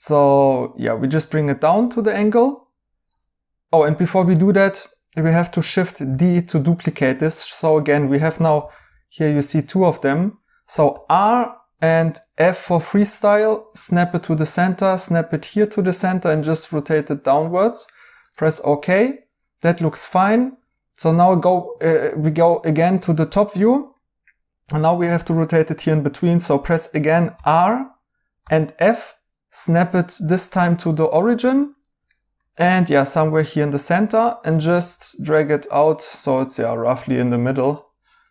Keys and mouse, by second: 1.4 right click, 4.1 ctrl+z, 6.0 d, 8.5 g, 8.7 g, 9.5 Escape, 10.8 r, 12.6 f, 18.4 right click, 21.2 right click, 27.3 r, 28.3 f, 30.7 right click, 32.0 right click, 37.6 right click.